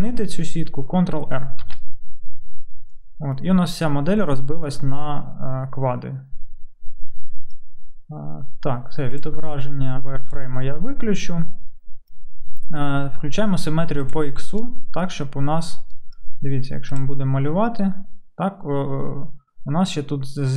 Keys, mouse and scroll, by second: 1.9 ctrl+r, 1.9 click, 6.0-14.2 middle drag, 14.2-16.9 right drag, 16.9-20.5 middle drag.